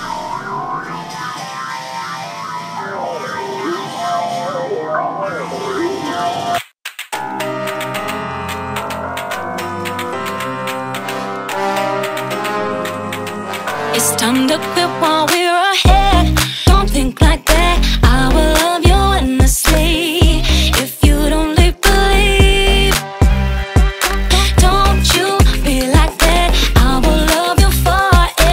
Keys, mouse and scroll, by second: 2.8 click, 3.2 click, 3.9 click, 4.8 click, 5.4 click, 6.5-8.0 drag, 9.2 click, 9.9 click, 10.5 middle click, 11.0 ctrl+a, 14.5 click, 16.2 drag, 17.8 drag, 19.3 drag, 20.2 click, 20.5 click, 21.4 click, 22.2 middle click, 22.7 ctrl+a, 25.9 drag, 27.6 click, 28.2 click.